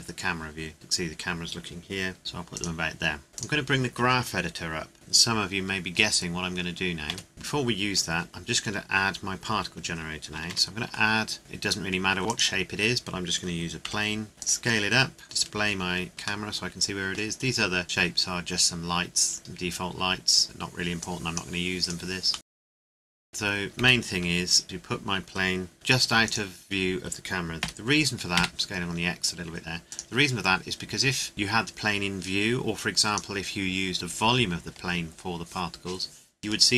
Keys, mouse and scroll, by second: 0.7 KP_0, 2.5 click, 3.3 KP_7, 3.3 click, 4.9 n, 7.1 ctrl+s, 7.3 middle click, 7.9-9.7 scroll up 1, 10.5 shift+a, 12.3 click, 13.8 KP_7, 14.3 s, 14.4 click, 14.7-15.2 scroll down 1, 15.2 shift+click, 16.4 middle click, 19.4 right click, 20.4 click, 21.8 right click, 22.3 middle click, 22.5 g, 22.7 right click, 22.9 Delete, 23.0 middle click, 23.1 click, 23.8 KP_0, 24.6 scroll down 1, 25.7 g, 26.2 click, 27.6 s, 28.3 x, 29.9 click.